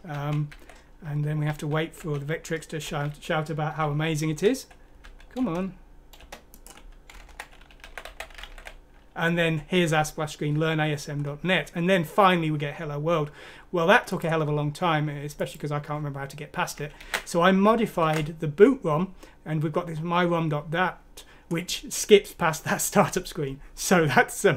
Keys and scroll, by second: 0.1-0.5 typing, 1.5-5.0 typing, 7.1-9.9 typing, 17.0 ctrl+z, 18.0 ctrl+z.